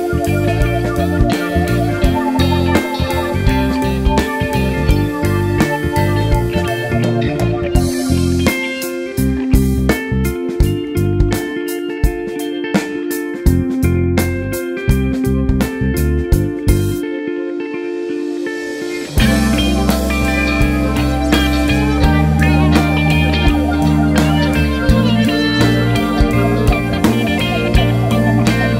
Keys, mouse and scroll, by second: 0.2 `, 0.5 scroll down 1, 0.6 `, 2.1 Tab, 2.4 alt+click, 2.8 KP_Decimal, 3.0 scroll up 1, 3.1 `, 7.5-8.4 scroll up 1, 8.7 ctrl+e, 9.2 Tab, 9.3 scroll down 1, 9.6 `, 10.0 scroll down 1, 10.2 `, 10.5-11.0 scroll up 1, 11.0 Tab, 11.0 `, 11.3 scroll up 1, 11.4 `, 13.1 Tab, 13.2 scroll, 13.3 scroll down 1, 13.7 `, 14.4 s, 14.6-18.6 drag, 15.6 `, 17.4 KP_1, 22.1 `, 22.6 r, 24.8 KP_7, 25.4 g, 27.0 r, 28.4 KP_1.